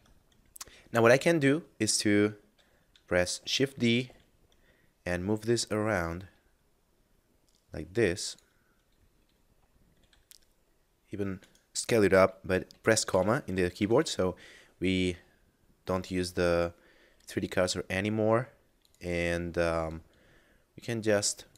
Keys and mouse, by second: 3.4 shift+d, 3.8 y, 8.2 click, 9.9 s, 11.4 right click, 13.6 s, 15.9 click, 16.3 s, 18.6 click.